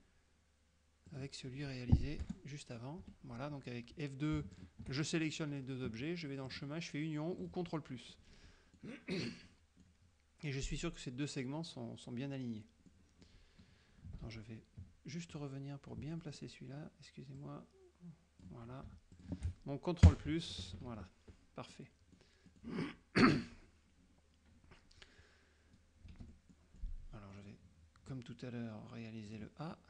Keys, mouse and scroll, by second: 1.2 click, 2.3 Return, 3.1 F2, 4.6 shift+click, 6.6 click, 7.5 click, 8.2 middle click, 9.3 middle click, 13.0 middle click, 14.4 ctrl+z, 15.4 ctrl+click, 16.2 middle click, 17.5-18.7 drag, 19.2 shift+click, 20.1 ctrl+KP_Add, 20.7 ctrl+KP_Subtract, 21.8 click, 22.5 click, 26.2 shift+F6, 26.6 shift+click, 27.4-29.8 middle drag.